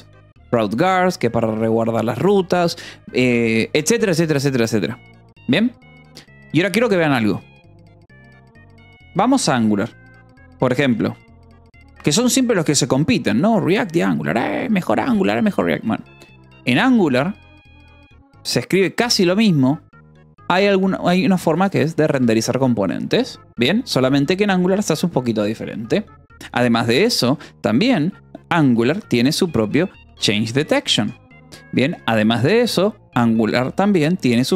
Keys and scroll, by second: 0.0-2.2 typing, 4.9 BackSpace, 5.6 Escape, 6.4 ctrl+s, 7.7 o, 8.7 BackSpace, 9.2 Return, 10.5 space, 11.2 n, 11.5 u, 11.9 Escape, 13.4 o, 14.3 Return, 14.6 :, 14.9 space, 21.4-22.4 typing, 23.4 o, 24.5 -, 24.8 space, 28.7-32.1 typing, 34.4-34.5 typing.